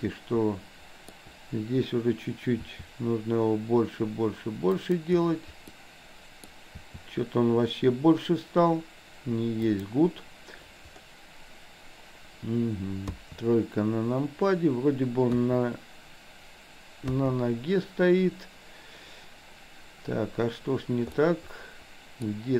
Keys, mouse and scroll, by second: 0.0-1.2 middle drag, 2.7 s, 5.7 middle click, 6.8 s, 10.6 middle click, 13.1 KP_3, 15.3 KP_1, 17.1 KP_3, 21.2 scroll up 1, 21.3-22.3 middle drag, 22.3 scroll down 1.